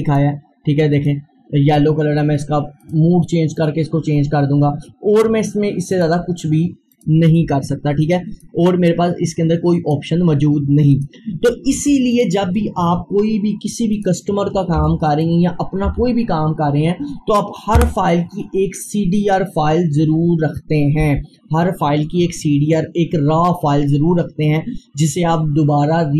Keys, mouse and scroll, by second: 5.9-10.9 drag, 12.6 scroll up 1, 13.9 click, 14.9 Delete, 15.1 click, 15.9 Delete, 16.6 scroll up 1, 17.8 F4.